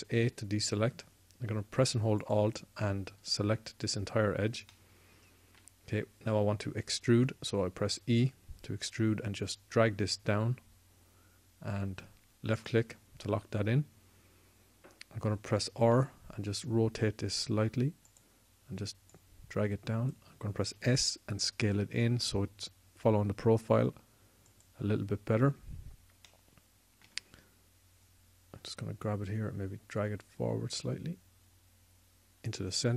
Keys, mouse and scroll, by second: 0.3 a, 8.7 e, 16.6 r, 19.9 click, 21.5 s, 29.7-31.7 drag.